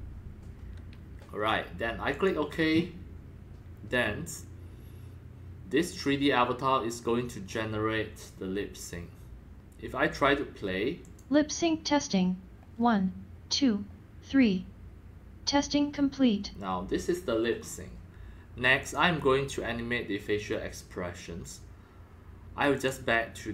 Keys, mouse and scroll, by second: 2.1 click, 6.8 click, 11.0-16.3 drag, 18.8-22.4 drag, 22.7 click.